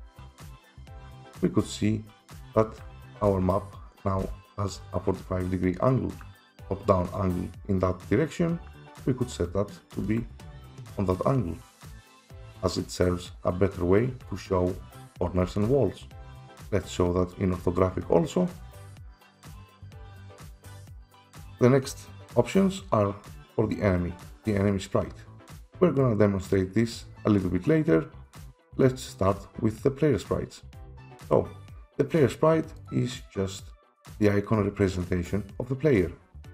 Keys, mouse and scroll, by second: 0.0 click, 0.0 typing, 0.7 click, 1.8 click, 2.5 click, 2.8-3.2 typing, 4.2-7.7 typing, 10.0-16.1 typing, 16.5 Escape, 16.5 click, 17.4 click, 18.5 click, 19.2-21.5 typing, 21.5 click, 32.9 click.